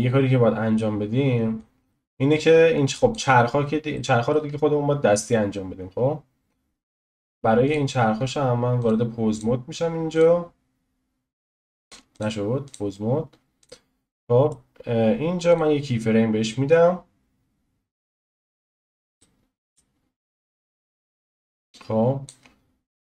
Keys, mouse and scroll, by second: 1.6-3.3 drag, 3.3-4.0 scroll up 1, 4.0 shift+middle click, 4.6-5.0 scroll up 3, 5.0 scroll down 1, 6.0 scroll down 1, 6.1-6.7 scroll up 1, 6.7 scroll down 1, 7.7 click, 8.9-10.2 drag, 12.7 click, 14.1-15.5 middle drag, 15.5-18.5 drag, 19.2-20.3 middle drag, 20.3 click, 22.6 scroll down 1.